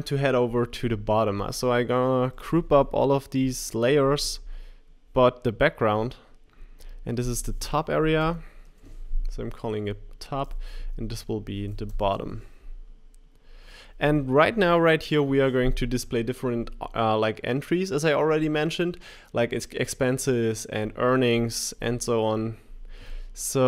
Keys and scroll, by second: 11.6 super+g.